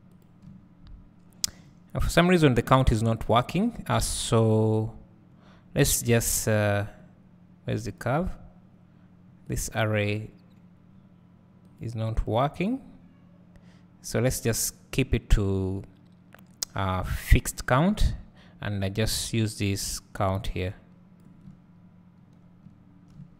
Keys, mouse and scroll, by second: 0.0 s, 17.5-22.4 drag, 22.9 click.